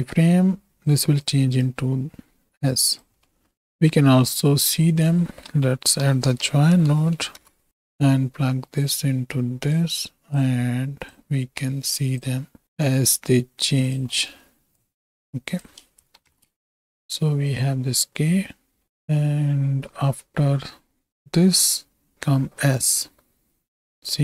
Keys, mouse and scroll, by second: 1.1 click, 1.3 right click, 1.6-3.0 right drag, 3.1-3.5 middle drag, 4.3-7.4 drag, 8.8-9.7 drag, 10.0 click, 11.0-12.1 drag, 12.2 click, 13.0 right click, 13.8 click, 14.1 middle click, 14.8 click, 16.2 shift+Right, 16.3 shift+Left, 16.4 space.